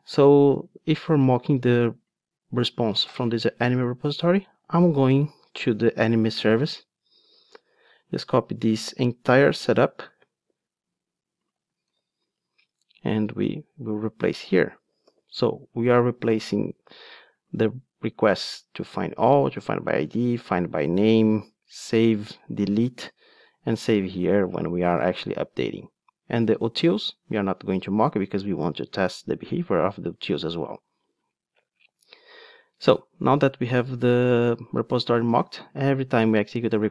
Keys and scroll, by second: 11.9 super+c, 12.4 ctrl+Tab, 15.0 super+v.